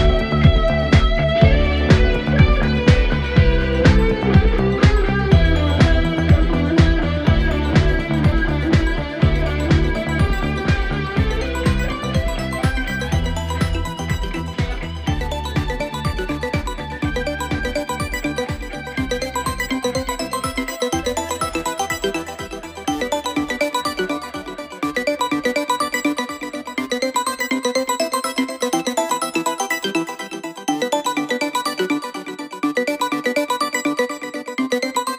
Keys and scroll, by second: 0.3 ctrl+z, 0.8 ctrl+z, 1.4 ctrl+z, 2.1 ctrl+z, 2.5 ctrl+z, 2.9 ctrl+z, 3.1 ctrl+z, 4.6 ctrl+z, 8.8 ctrl+z, 10.3 ctrl+z, 10.8 ctrl+z, 11.5 ctrl+z, 33.2 ctrl+z.